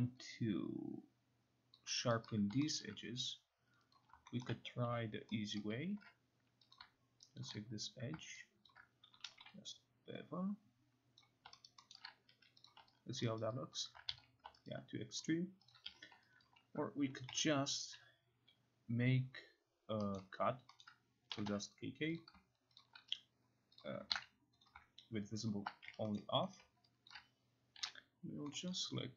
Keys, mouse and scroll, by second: 1.8 alt+click, 2.1 alt+right click, 2.8 alt+middle click, 4.0 click, 4.4 alt+middle click, 4.9 9, 5.6 middle click, 6.0 q, 6.8 click, 7.4 shift+click, 8.7 shift+click, 9.0-9.9 typing, 11.2 click, 11.7 alt+right click, 11.9 alt+middle click, 12.3 q, 12.7 click, 13.2 alt+click, 13.8 alt+right click, 14.1 ctrl+z, 14.7 alt+right click, 15.7 click, 15.9 q, 16.5 alt+click, 17.0-17.8 typing, 20.2 middle click, 21.1 middle click, 21.4 typing, 22.2 click, 22.8 shift+click, 23.8 click, 24.1 ctrl+z, 24.7 click, 25.5 shift+click, 25.9 Escape, 26.2 middle click, 26.6 middle click, 27.1 alt+click, 27.8 9, 28.7 middle click.